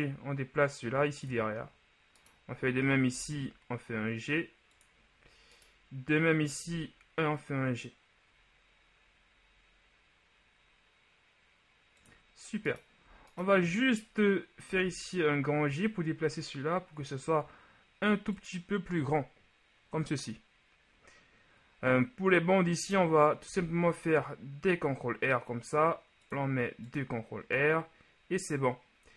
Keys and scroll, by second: 3.2 g, 6.8 g, 14.7 g, 23.5 ctrl+r.